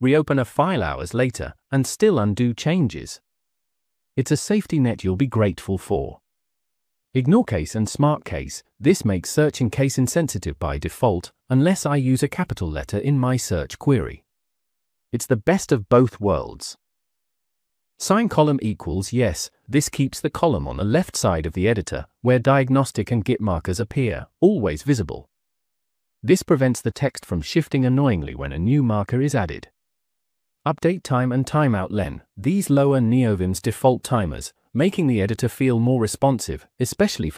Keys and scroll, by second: 5.9 j, 6.2 j, 7.4-8.5 typing, 18.5 Escape, 19.0 j, 19.4 j, 20.4-21.6 typing, 28.7 Escape, 29.5-32.2 typing.